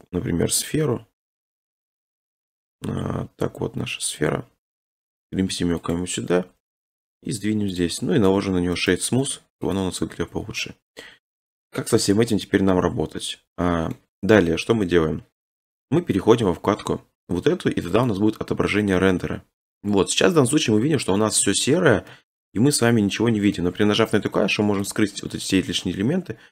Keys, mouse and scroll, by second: 5.0 click, 5.0 middle click, 5.0-6.8 typing, 5.3 scroll, 5.9 click, 7.8 click, 8.2 middle click, 8.2 middle click, 8.9 right click, 9.3 click, 9.7 click, 10.6 middle click, 11.3 click, 12.0 middle click, 12.2 middle click, 13.9 middle click, 14.2 scroll, 18.1 click, 19.8 scroll, 21.4 middle click, 22.6 scroll, 23.5-24.9 scroll, 24.9 click.